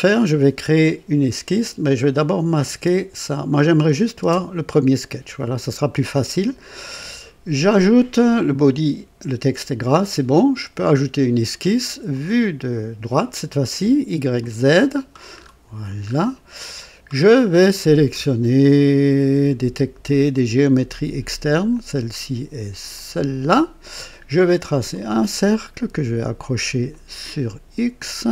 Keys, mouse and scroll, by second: 1.9 click, 2.6 space, 3.7 click, 4.2 space, 10.6 click, 12.0 click, 14.3 click, 15.3-16.2 scroll up 2, 16.5-17.1 right drag, 17.2-18.0 scroll up 2, 18.0 right click, 20.2 click, 21.6 click, 22.9 click, 24.8 click, 26.8 click, 28.2 click.